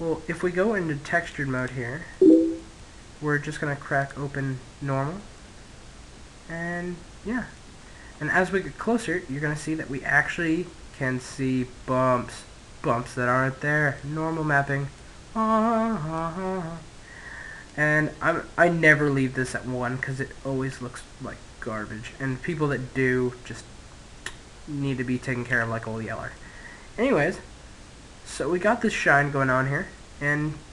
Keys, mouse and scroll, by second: 1.7-2.8 middle drag, 3.7 click, 3.7 middle click, 5.2-6.6 middle drag, 7.3-10.2 middle drag, 13.8-17.1 middle drag, 17.3 click, 25.6-27.7 middle drag.